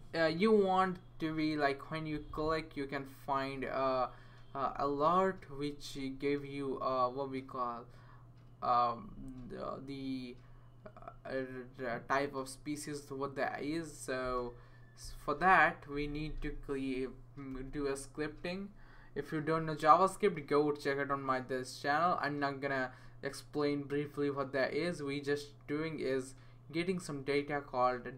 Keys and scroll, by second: 16.1 Return, 16.3 Return, 17.5 super+v.